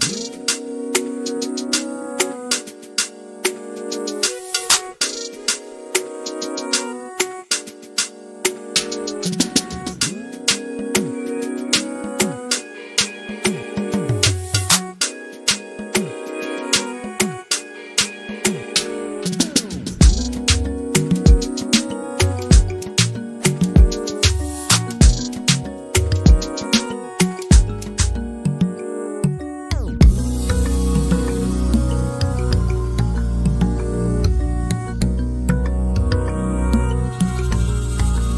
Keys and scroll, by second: 2.4-3.2 typing, 7.5-10.2 typing, 11.2-13.7 typing, 15.8-16.6 typing, 18.5-20.1 typing, 21.6 typing, 24.3-25.0 typing.